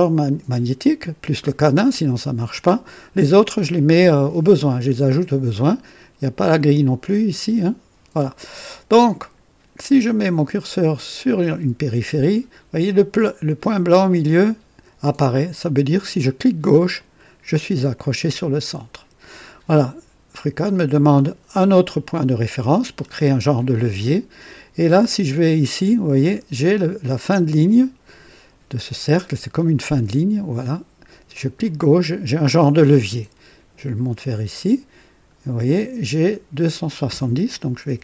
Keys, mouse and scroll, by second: 16.9 click, 22.7-23.0 scroll up 2, 31.5 click, 37.8 KP_2.